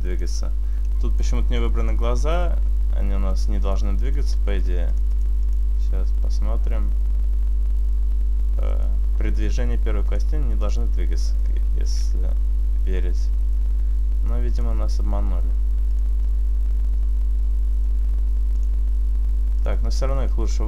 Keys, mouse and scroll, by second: 0.9 middle click, 1.5 middle click, 3.7 click, 5.0 click, 5.5 click, 8.8 right click, 10.1 click, 10.8 click, 11.4 right click, 11.8 r, 13.6 right click, 14.6 click, 17.8 right click, 18.6 click, 20.4 middle click.